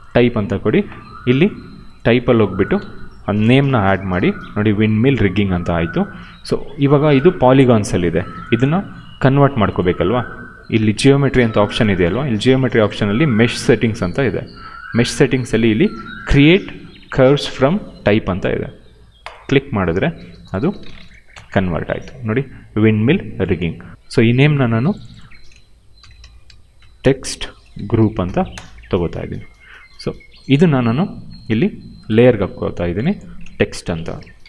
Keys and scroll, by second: 2.9 ctrl+a, 3.3 ctrl+v, 21.2 Delete, 25.6-28.2 typing, 28.5 Return, 29.2 ctrl+a, 33.6-34.4 typing.